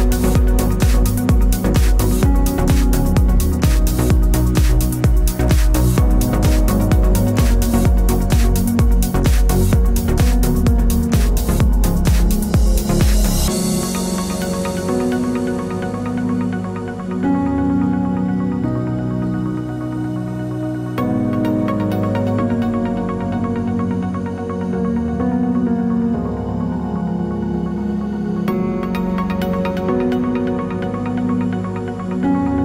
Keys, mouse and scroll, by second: 0.3 g, 2.6 click, 2.8-5.6 middle drag, 3.6 g, 5.6-6.2 scroll up 2, 6.2-9.4 middle drag, 6.2 g, 8.0 g, 8.9 r, 9.4 click, 9.5-11.7 middle drag, 11.7 click, 11.8 middle click, 12.5 click, 13.2 g, 13.7 click, 14.0 g, 14.4-16.4 middle drag, 15.9 g, 16.4 click, 16.5 g, 16.7 click, 18.3 Tab, 18.3-21.6 middle drag, 20.2 g, 21.6 KP_7, 22.1-24.1 middle drag, 22.8 r, 24.2 click, 24.2-25.8 middle drag, 25.4 Tab, 25.8 click, 26.2 g, 26.9 middle click, 27.8 click, 28.3 g, 29.1 click, 29.2 g, 30.0 middle click, 30.8 click, 30.9 g, 31.5 click, 31.6 g, 32.0 click, 32.4 g.